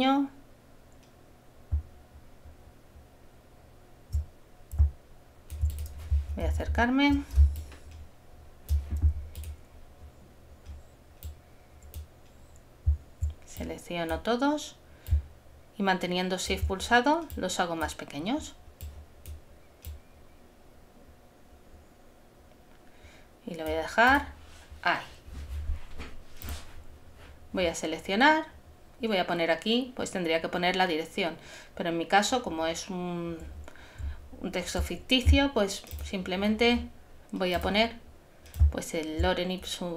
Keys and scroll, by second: 7.4 super+space.